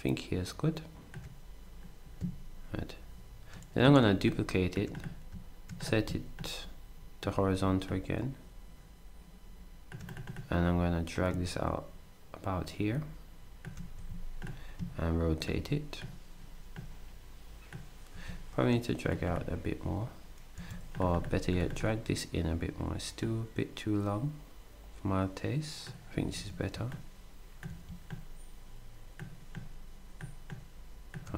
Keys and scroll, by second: 4.0 ctrl+d, 13.9 s, 18.1 z, 20.5 s, 26.3 s, 27.7 z.